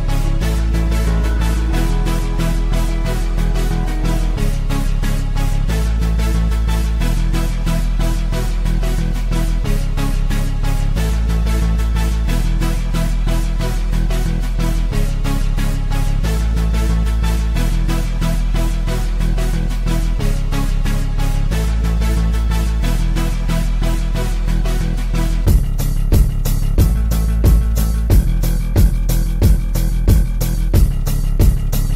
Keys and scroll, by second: 8.0 shift+Page_Up, 9.6 c.